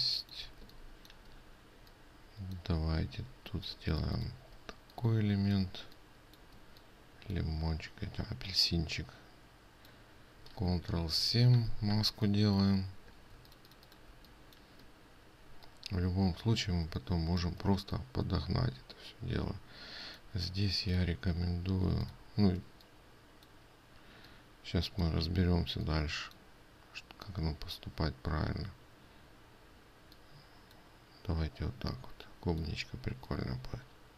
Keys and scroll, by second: 4.2 ctrl+space, 11.7 ctrl+7, 21.4 ctrl+space.